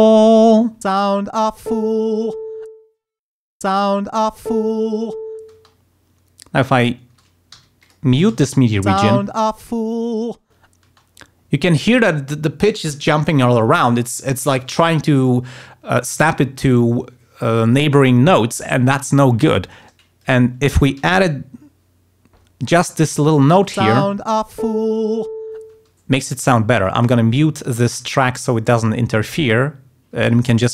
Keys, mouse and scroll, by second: 0.0 click, 0.9 space, 2.8 space, 3.7 space, 5.5 space, 7.5 g, 7.8 click, 8.3 alt+1, 8.9 space, 10.8 space, 20.2 click, 21.0 alt+1, 23.8 space, 25.7 space, 26.9 click.